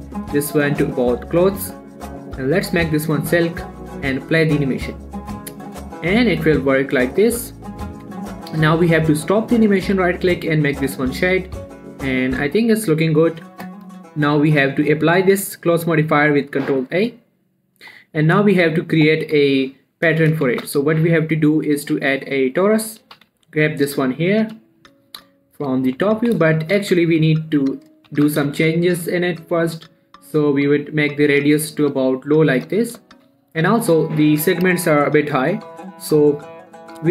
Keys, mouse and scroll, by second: 0.0 middle click, 1.2 click, 3.6 middle click, 4.2 space, 8.3 space, 8.7 middle click, 9.0-9.7 scroll up 1, 10.3 right click, 10.6 click, 10.9 middle click, 11.2 q, 11.5 click, 11.8-13.7 middle drag, 13.7 click, 15.6 ctrl+a, 17.5-17.8 scroll down 1, 18.4 middle click, 19.0 shift+middle click, 20.9 shift+a, 22.9 click, 23.5 g, 23.7 x, 24.2 click, 24.9 7, 25.5 shift+middle click, 26.6 x, 26.7 click, 27.0 shift+a, 28.2 click, 28.5 z, 28.9 shift+middle click, 29.2-30.1 shift+scroll up 2, 30.1-33.5 drag, 33.5 shift+middle click, 33.7 shift+scroll up 1, 34.2 click.